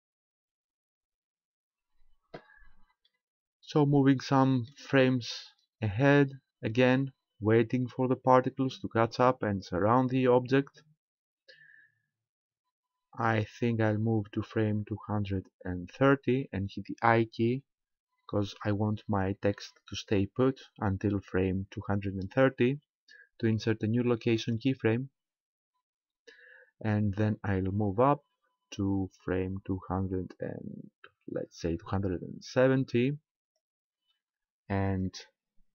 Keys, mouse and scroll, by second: 3.1 middle click, 5.8 click, 28.0 click.